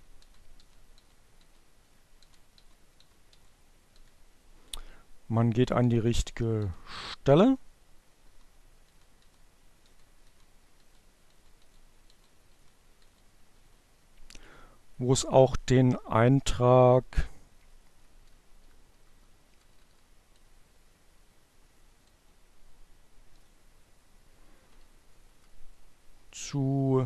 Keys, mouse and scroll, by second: 0.5 Page_Down, 1.0 Page_Down, 1.7 Page_Down, 3.3 Page_Down, 9.3 Down, 10.9 Down, 12.3 Up, 17.0 Down, 22.1 Page_Up, 22.9 Down, 26.9 click.